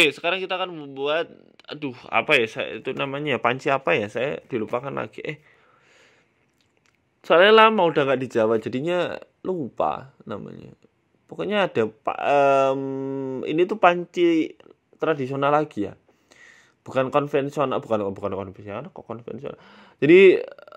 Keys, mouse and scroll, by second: 0.0 scroll down 1, 0.4 scroll up 3, 0.7 KP_1, 1.1 shift+middle click, 1.6-1.9 scroll up 2, 2.0 shift+middle click, 2.3 shift+a, 3.1 right click, 3.3 shift+s, 4.2 shift+a, 5.5 s, 6.3 g, 9.1 shift+middle click, 9.3 shift+scroll down 1, 9.6 Tab, 9.8 scroll up 2, 10.3 ctrl+r, 11.1 s, 12.7 Tab, 12.9 s, 13.5 s, 14.5 Tab, 14.8 click, 15.2 s, 15.8 ctrl+b, 19.1 s, 19.9 ctrl+b.